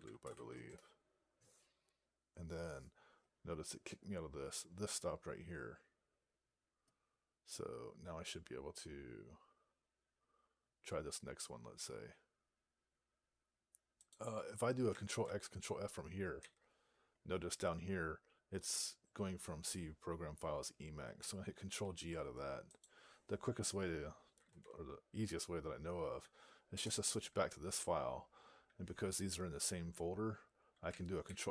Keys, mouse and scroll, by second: 0.5 Return, 16.2 ctrl+f, 21.7 ctrl+g.